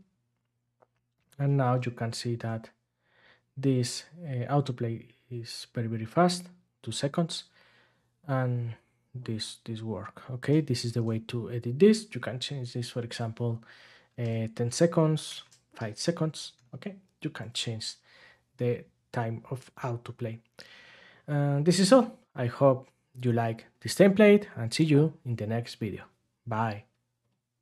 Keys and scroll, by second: 1.5 ctrl+Tab, 10.8 ctrl+Tab, 15.2 BackSpace.